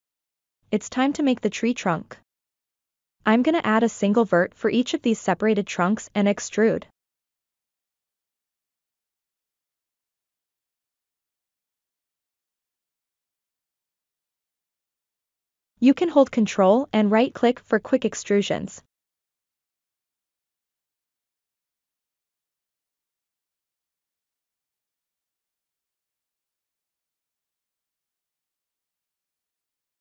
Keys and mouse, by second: 1.1 click, 2.7 click, 4.0 KP_1, 5.5-6.6 ctrl+middle drag, 6.8-7.7 shift+middle drag, 9.5 shift+a, 13.8-15.3 drag, 16.4 ctrl+click, 18.1 click, 19.4 click, 20.8 ctrl+click, 22.9-23.8 ctrl+drag, 24.8 ctrl+right click, 27.2 ctrl+right click, 28.5 click.